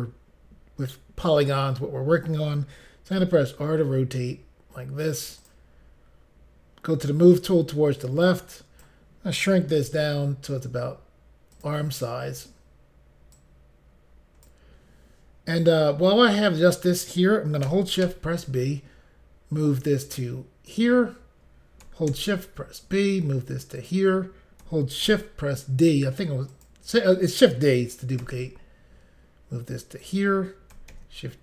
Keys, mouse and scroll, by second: 5.4 click, 7.2 click, 8.3 click, 9.8 s, 11.5 click, 13.3 click, 20.7 click, 22.1 d, 23.8 click, 25.1 d, 26.5 click, 30.0 click, 30.9 d.